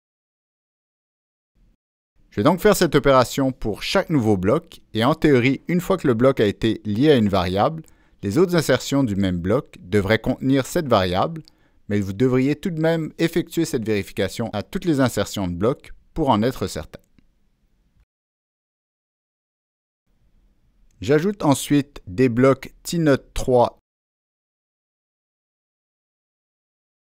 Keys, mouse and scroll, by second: 2.1 click, 5.0 click, 7.8 click, 10.1-11.0 drag, 13.8 click, 17.2 click, 19.2 click, 21.8 click, 26.4-27.0 drag.